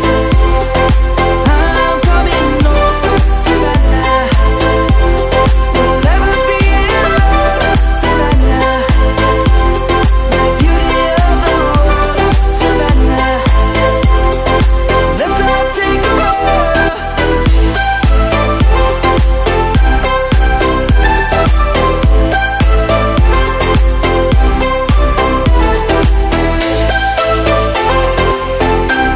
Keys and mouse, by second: 0.4 click, 0.7 middle click, 3.2 middle click, 5.2 s, 6.9 click, 7.5 middle click, 8.4 click, 9.8 g, 10.9 right click, 12.2 right click, 13.3 middle click, 14.3 click, 15.0 Tab, 15.4 click, 17.9 shift+click, 21.9 click, 24.0 click.